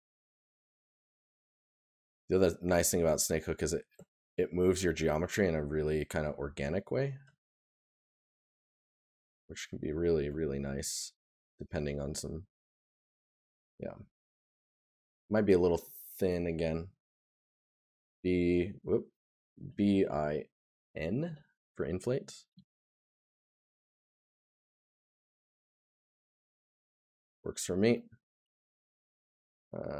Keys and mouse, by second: 1.3 right click, 7.2 right click, 11.4 right click, 13.9 right click, 16.6 right click, 23.6 right click, 29.7 right click.